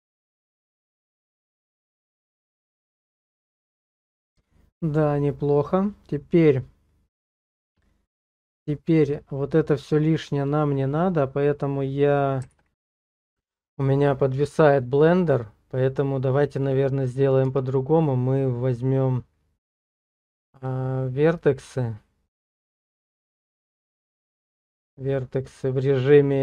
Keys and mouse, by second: 7.4-8.6 drag, 8.7 shift+middle click, 10.4 click, 12.5 alt+w, 17.5 Tab, 22.4-25.7 drag.